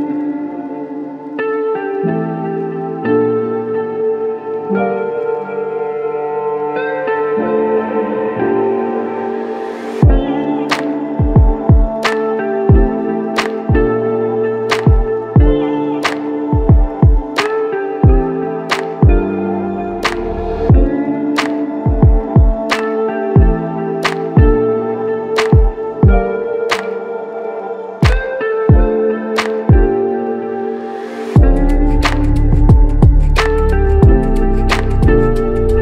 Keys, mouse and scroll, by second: 0.1 double click, 5.7 f, 7.5 double click, 15.3 shift+click, 15.5 shift+double click, 15.8 shift+click, 17.8 shift+click, 17.9 alt+shift+click, 22.1 r, 26.8 r.